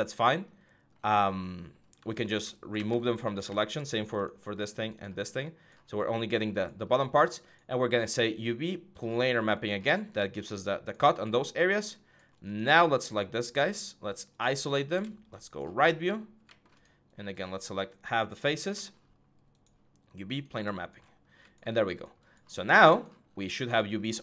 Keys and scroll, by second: 3.0 5, 15.8 alt+4, 20.8 6.